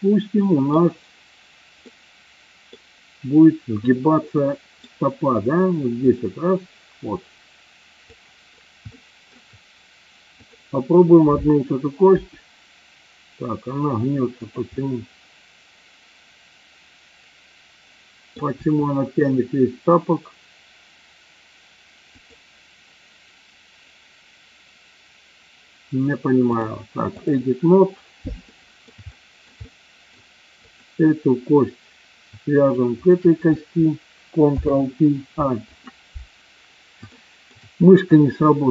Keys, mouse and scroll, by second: 1.8-2.7 middle drag, 4.3 middle click, 6.1-8.1 drag, 8.9 shift+middle click, 10.3 click, 12.1 r, 14.3 click, 14.8-18.3 middle drag, 18.6 r, 22.2 click, 26.6 click, 28.6 middle click, 29.1 shift+middle click, 29.7 middle click, 30.7 click, 33.0 shift+click, 34.4 ctrl+p, 37.0 shift+middle click.